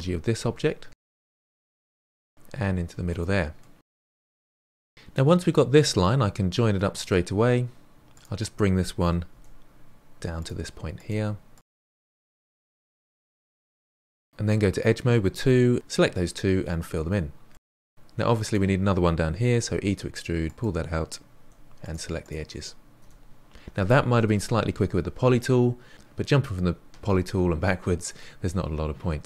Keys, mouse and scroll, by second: 1.6 e, 2.1 middle click, 2.5 e, 3.0 middle click, 3.3 e, 4.0 middle click, 5.5-8.1 middle drag, 8.1 click, 9.3 g, 10.9 click, 11.0 g, 11.8 g, 13.5 2, 13.7 click, 15.4 f, 17.1 middle click, 18.0 1, 18.4 click, 19.5 e, 21.4 2, 21.8 click, 22.1 shift+click, 22.9 f, 28.1-29.2 middle drag.